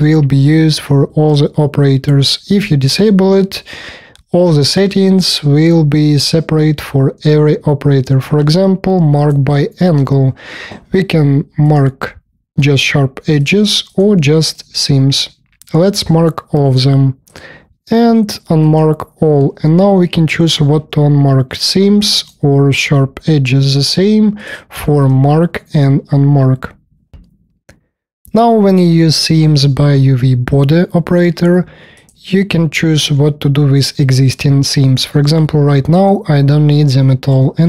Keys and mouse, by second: 11.7 click, 13.9 click, 14.4-17.2 drag, 17.2 click, 18.7-22.1 drag, 24.3 click, 24.6 space, 24.7 KP_4.